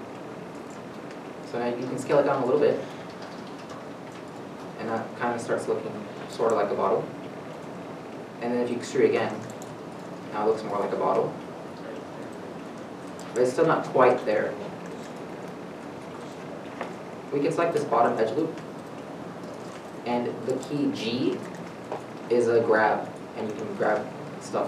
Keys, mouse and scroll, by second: 4.9 scroll down 1, 5.8-6.4 scroll up 1, 6.4 middle click, 6.4-7.0 scroll up 1, 7.0 scroll down 1, 8.2 middle click, 9.7 e, 10.3 scroll, 10.9 middle click, 11.0 scroll down 1, 11.7-12.1 scroll down 1, 12.1 middle click, 12.3 scroll up 1, 14.9 middle click, 15.4-16.1 scroll up 1, 16.1 scroll down 1, 16.3 shift+middle click, 18.4 alt+click, 19.1 middle click, 21.7 middle click, 21.7 g.